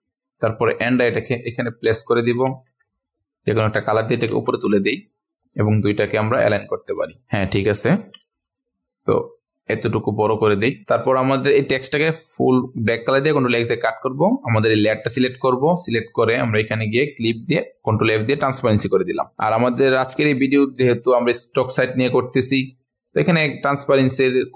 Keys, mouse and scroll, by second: 2.2-2.6 typing, 2.8 click, 5.1 click, 7.2-7.5 ctrl+alt+scroll up 1, 7.5 click, 9.2-12.3 alt+shift+drag, 13.2 ctrl+x, 13.9 click, 17.8 ctrl+f, 19.0 click, 20.8-22.2 ctrl+alt+scroll down 1, 22.2-24.5 drag.